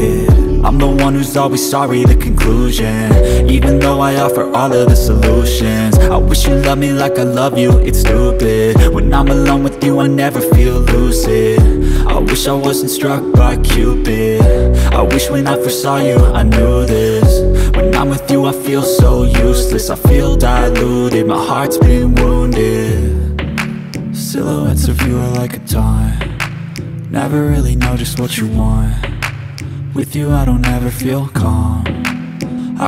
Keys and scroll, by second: 0.8 F3, 3.8 e, 4.1 Escape, 5.3 F3, 5.6 F2, 7.7 e, 8.2 Escape, 8.8 F3, 11.0 F2, 15.3 1, 15.8 Return, 16.1 2, 16.6 3, 17.2 ctrl+space, 19.3 ctrl+k, 21.7 ctrl+r, 23.0 k, 26.0 ctrl+k.